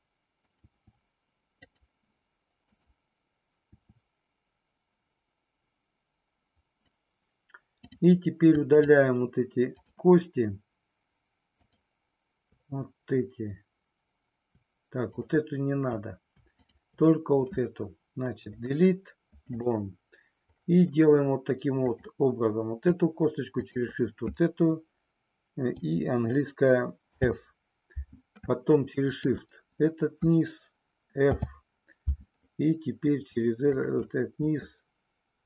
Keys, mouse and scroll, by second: 0.6 e, 2.6 click, 3.8 e, 6.8 click, 7.7 click, 9.7 shift+click, 11.5 shift+click, 16.6 shift+click, 21.9 click, 27.1 f, 29.0 click, 31.2 f, 33.7 click.